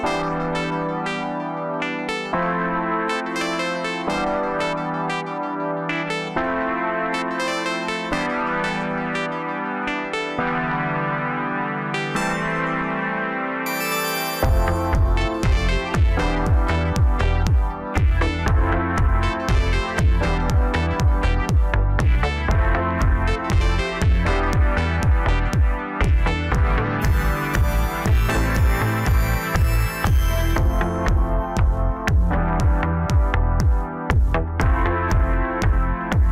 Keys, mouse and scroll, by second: 0.3 shift+click, 1.2 j, 2.2 click, 3.4 shift+click, 5.6 j, 6.5-8.2 middle drag, 8.2 click, 9.0 click, 9.2 click, 9.5 middle click, 10.2-11.0 scroll up 2, 11.0 g, 13.9-16.6 middle drag, 16.6 click, 17.6 shift+click, 19.4-20.7 middle drag, 20.7 g, 23.3-25.5 middle drag, 25.5 a, 26.3-26.7 scroll down 1, 26.7 middle click, 27.5-28.3 scroll up 1, 28.3 e, 33.6 click, 34.6 click, 35.7 ctrl+b.